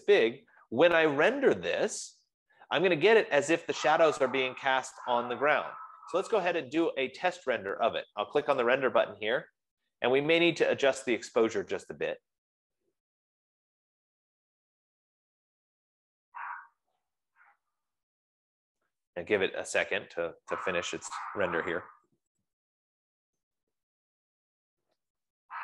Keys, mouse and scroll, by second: 1.0 Escape, 9.0-14.1 drag.